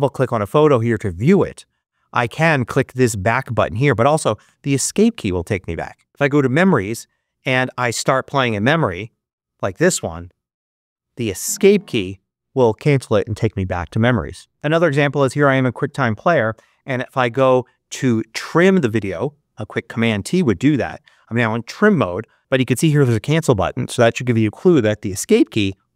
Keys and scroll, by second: 4.3 Escape, 11.4 Escape, 25.5 Escape.